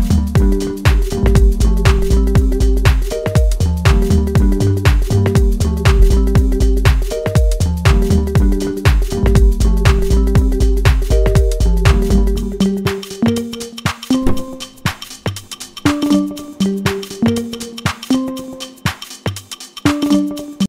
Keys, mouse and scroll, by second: 1.9-4.6 drag, 5.5-8.3 drag, 8.9 click, 10.1-12.5 drag, 13.1-14.8 drag, 16.4-17.4 drag, 17.7-18.7 scroll down 2, 18.7-19.6 scroll down 2.